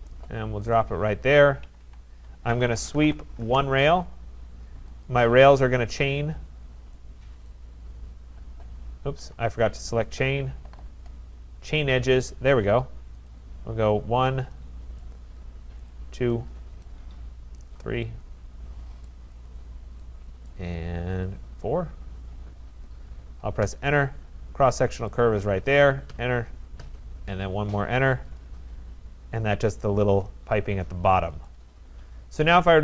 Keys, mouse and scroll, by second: 0.7 click, 1.6 Escape, 1.8 Escape, 2.4-3.5 typing, 5.1 click, 6.2 click, 6.6-6.9 scroll, 7.5 right click, 7.8 scroll, 9.2 Escape, 9.9 right click, 11.8 click, 13.3 click, 14.0 click, 15.0 right click, 15.9 click, 16.8 right click, 17.7 click, 19.0 right click, 19.5 click, 20.4 right click, 21.2 click, 22.2-22.8 scroll, 23.6 Return, 25.1 click, 26.1 Return, 26.8 Return, 28.4 click, 29.6 scroll, 30.1 middle click, 31.4 right click, 32.7 click.